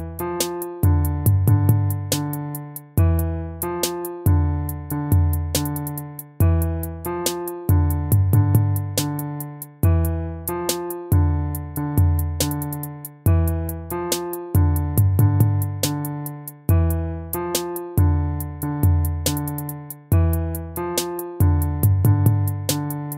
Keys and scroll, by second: 13.5 ctrl+-, 19.1 ctrl+z, 21.6 ctrl+-.